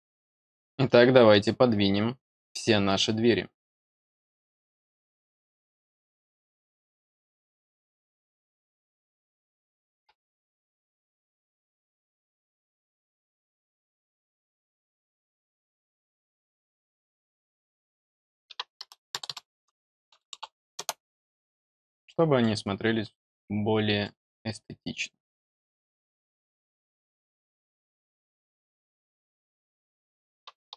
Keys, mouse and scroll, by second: 0.5 middle drag, 2.3 scroll up 1, 2.4 scroll down 1, 4.3 click, 5.1 click, 6.0 click, 7.9 click, 12.6 click, 13.3 scroll up 1, 15.2 click, 22.0-22.3 middle drag, 22.6 scroll down 2, 23.1 middle click, 24.4-24.9 middle drag, 27.3 click, 28.3 click.